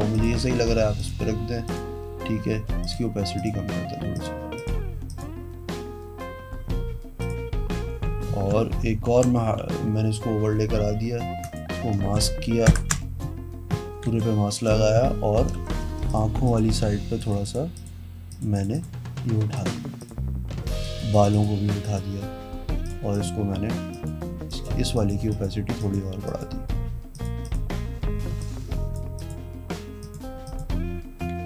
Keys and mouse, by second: 0.3 click, 1.9 click, 3.0 click, 3.6 click, 4.8 click, 5.3 click, 7.4 click, 9.3 ctrl+j, 11.6 click, 12.9 alt+BackSpace, 14.3 e, 15.6-17.1 typing, 16.3 click, 17.4 click, 17.7 click, 18.5 click, 18.7 click, 18.9 click, 19.4 ], 19.7 click, 20.2 click, 20.7 ], 21.0 click, 21.3 click, 21.5 click, 22.0 click, 23.0 click, 24.1 click, 24.7 click, 25.2 click, 25.5 click, 26.0 click, 26.5 click, 27.3 click, 27.6 click, 28.6 click, 29.4 click, 30.2 click, 30.6 click.